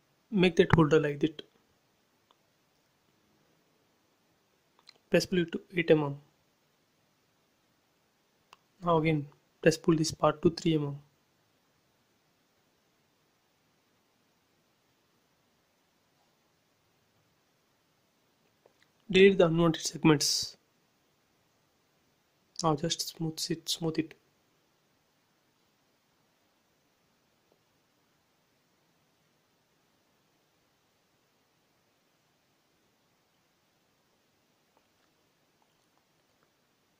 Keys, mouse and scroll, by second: 0.8 click, 1.0 space, 1.6 click, 2.3 p, 2.6 click, 4.8-7.0 middle drag, 7.0-7.5 typing, 7.8 Return, 8.5-10.5 shift+middle drag, 10.5 click, 11.3 space, 11.9 middle click, 13.0 click, 13.9 p, 14.2 click, 15.4 space, 16.5 p, 16.6 click, 17.9-21.9 typing, 18.8 Return, 19.6 scroll up 1, 20.4 click, 20.7 scroll up 1, 20.8 middle click, 21.6 click, 22.1-22.5 scroll down 1, 22.5 click, 23.6 right click, 24.8 click, 27.8 click, 28.4 scroll down 1, 28.9 click, 29.3-30.9 middle drag, 30.9 shift+e, 31.2 space, 31.3 middle click, 31.4 middle click, 31.9 scroll down 1, 33.2 shift+middle click, 33.6 scroll down 1, 35.1 middle click, 35.8 scroll up 1, 36.2 shift+middle click.